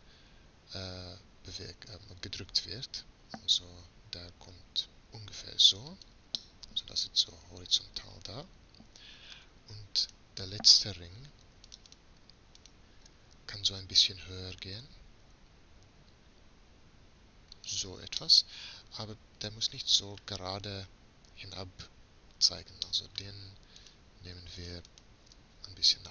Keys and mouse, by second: 1.7 g, 6.5-8.3 middle drag, 10.1-14.7 middle drag, 14.7 g.